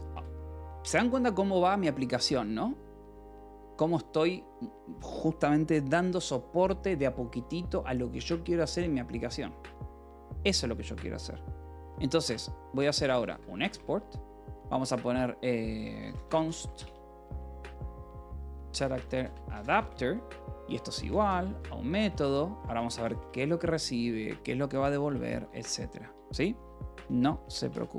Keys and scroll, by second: 0.0 Return, 0.7 a, 12.4-14.0 typing, 15.5-22.8 typing, 23.1 Return, 24.9-25.9 typing, 26.0 Return, 27.0-27.9 typing.